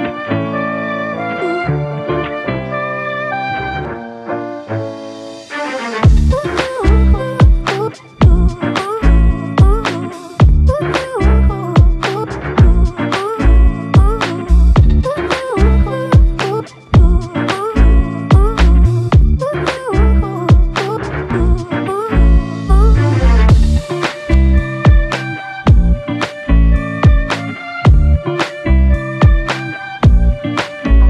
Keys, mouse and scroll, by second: 13.1 ctrl+z, 14.9 double click.